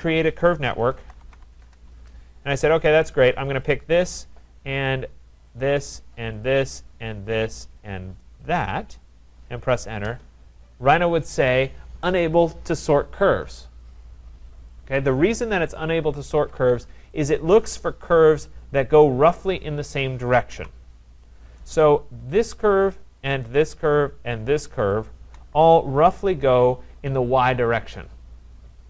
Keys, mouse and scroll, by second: 0.6-1.8 typing, 3.6 click, 5.6 click, 6.4 click, 7.5 click, 8.6 click, 10.0 Return, 16.3 Escape, 16.6 Escape, 17.3 click, 20.5 Delete, 22.5 click, 23.8 shift+click, 25.0 click.